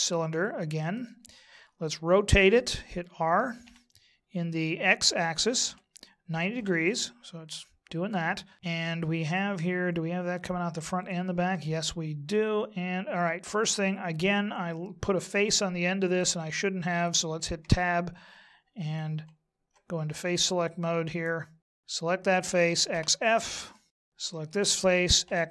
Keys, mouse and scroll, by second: 3.7 r, 9.3 middle click, 17.6 Tab, 21.6 click, 21.8 right click, 22.6 x, 23.7 middle click, 24.3 right click, 25.2 x.